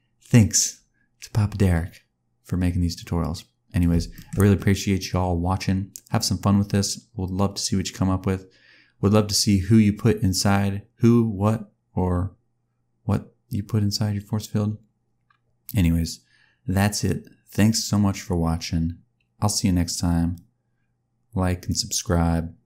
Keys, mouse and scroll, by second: 4.1 shift+middle click, 4.3 scroll down 1, 4.9 click.